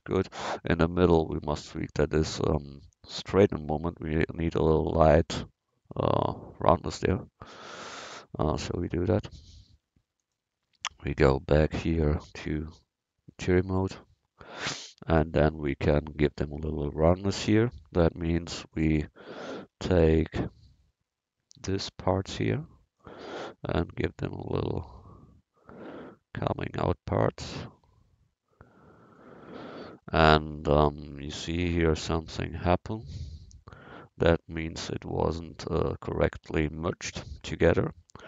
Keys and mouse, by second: 7.8 Tab, 9.2-11.2 drag, 12.3 click, 13.7 click, 16.4-18.8 middle drag, 18.8-21.6 drag, 19.3 a, 21.6 c, 23.0-24.8 drag, 30.6 a, 32.1 middle click, 33.0 middle click, 34.9 middle click, 35.2 middle click, 35.5 middle click, 35.6-37.7 drag.